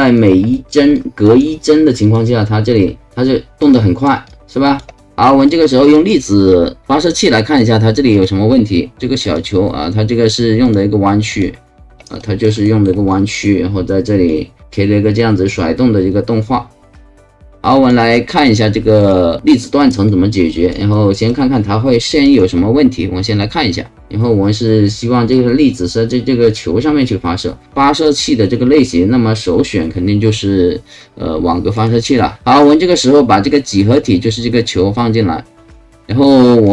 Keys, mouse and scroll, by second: 0.1 alt+click, 0.5 alt+middle click, 0.9 alt+click, 2.0 alt+click, 3.6 alt+click, 4.2 alt+click, 5.0 alt+right click, 5.4 alt+click, 8.1 alt+click, 9.2 click, 10.6 click, 11.3 click, 12.2 right click, 12.6 alt+middle click, 13.1 alt+click, 14.2-17.9 alt+drag, 19.0 click, 20.0 click, 20.9 alt+right click, 21.5 alt+click, 31.7 click, 32.3 alt+click, 34.6-35.6 alt+drag, 36.6 alt+click.